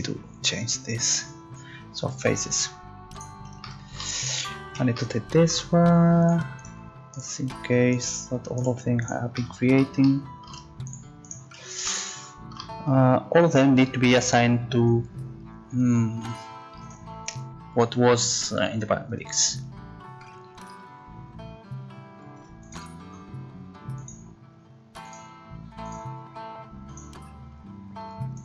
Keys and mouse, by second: 1.1-2.4 right drag, 2.4-5.4 middle drag, 9.4 middle click, 14.8-20.9 drag.